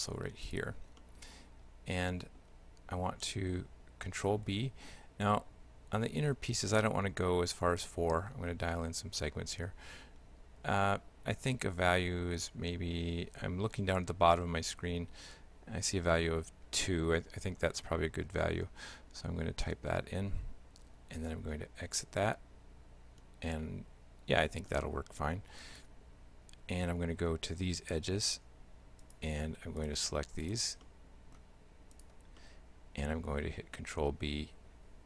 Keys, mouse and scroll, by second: 0.5 shift+right click, 1.0 shift+middle click, 4.4 ctrl+b, 21.2 Tab, 22.3 shift+middle click, 25.6 right click, 26.9 Tab, 29.1 right click, 29.8 shift+right click, 30.5 right click, 30.9 shift+middle click, 32.0 shift+right click, 32.4 shift+middle click, 34.0 ctrl+b.